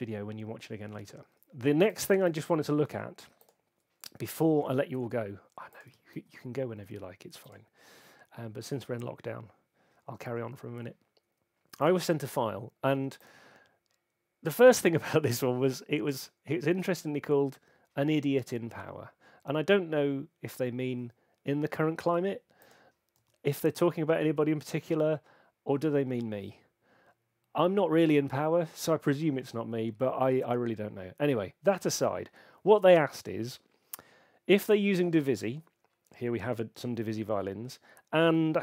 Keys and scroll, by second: 2.2 shift+super+w, 6.1 shift+super+w, 23.1 alt+super+m.